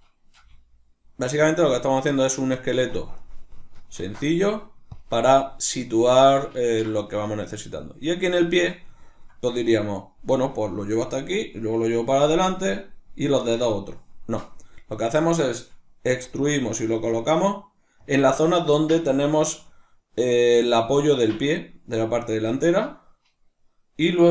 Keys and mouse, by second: 0.4 g, 1.6 click, 2.2 right click, 2.6 shift+middle click, 3.2 right click, 4.0 ctrl+alt+s, 5.0 click, 5.7 right click, 6.2-14.7 shift+middle drag, 14.7 right click, 16.1 e, 18.1 click.